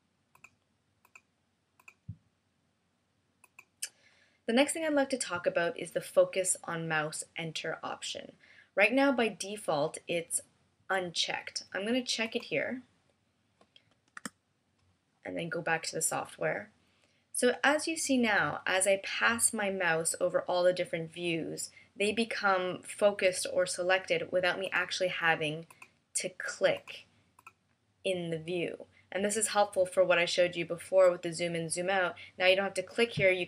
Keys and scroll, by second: 14.1 Return.